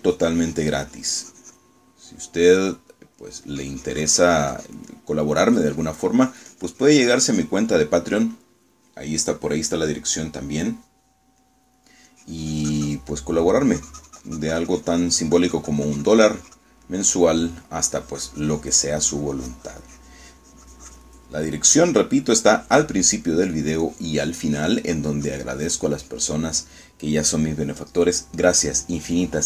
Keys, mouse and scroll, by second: 2.9 middle click, 3.6 middle click, 4.6-6.0 drag, 6.0 middle click, 6.6-8.7 drag, 8.8 middle click, 12.5 middle click, 13.2-14.7 drag, 14.8-18.0 drag, 18.0 middle click, 19.0-22.3 drag, 22.3 middle click, 22.8 click, 23.7 click, 24.4 middle click, 25.0 click.